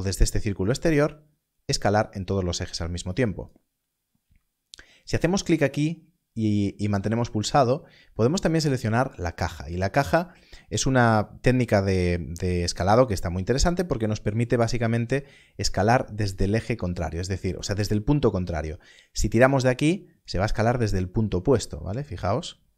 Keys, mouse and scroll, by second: 0.6 click, 2.9 click, 3.1 click, 9.9 click, 10.9-12.9 scroll down 1, 14.1 click, 16.2 right click, 22.2 click.